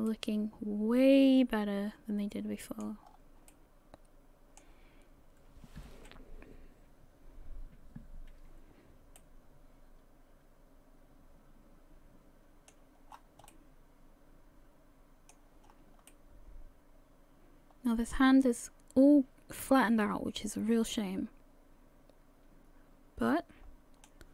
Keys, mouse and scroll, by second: 0.1 middle click, 3.0-3.5 scroll down 4, 3.5 middle click, 9.2 middle click, 13.1-14.2 scroll down 4, 13.5 middle click, 15.6 scroll up 4, 16.1 middle click.